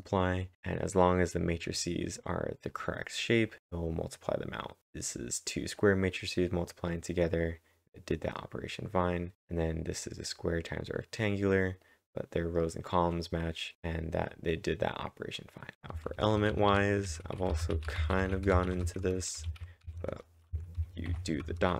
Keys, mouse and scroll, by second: 0.1 click, 5.6-6.3 typing, 5.8 click, 6.1 click, 8.8-10.8 typing, 9.0 double click, 10.3 click, 11.0-13.7 drag, 13.7-15.7 drag, 15.7-21.7 typing, 15.7-17.7 drag, 17.9 click, 18.3 click.